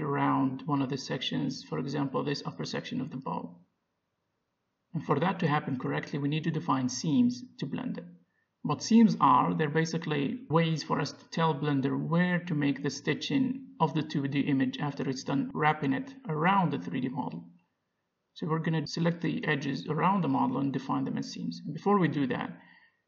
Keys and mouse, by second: 2.2 middle click, 3.6-8.3 drag, 7.9 middle click, 9.1 middle click, 11.8 click, 13.3 click, 13.3 right click, 14.0-20.0 middle drag, 17.3 click, 17.3 right click, 20.0-23.0 drag, 22.9 right click.